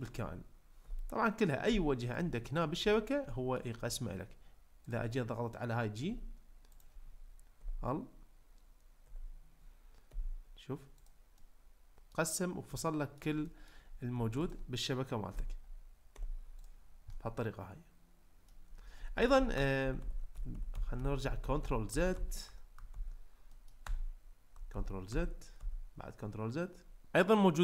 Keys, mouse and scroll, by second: 0.0 click, 0.8 l, 1.7 g, 2.2 click, 2.9 shift+middle click, 3.3 middle click, 6.1 g, 7.6 l, 9.1 l, 10.1 g, 11.0 click, 11.4 middle click, 12.8 shift+middle click, 13.4 middle drag, 14.5 click, 15.3 l, 16.1 g, 16.6 click, 17.1-18.6 middle drag, 19.1 ctrl+z, 19.8 ctrl+z, 20.4 ctrl+z, 20.6 ctrl+z, 21.0 ctrl+z, 21.2 ctrl+z, 21.5 ctrl+z, 21.6 ctrl+z, 22.0 ctrl+z, 23.1 ctrl+z, 23.6 middle click, 23.8 Tab, 24.9 ctrl+z, 25.3 ctrl+z.